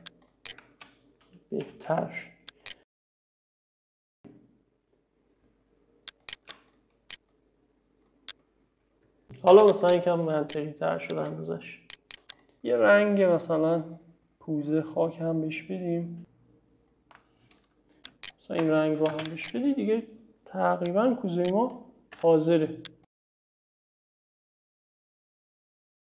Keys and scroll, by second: 1.7 m, 9.6 space, 19.2 space, 22.2 e.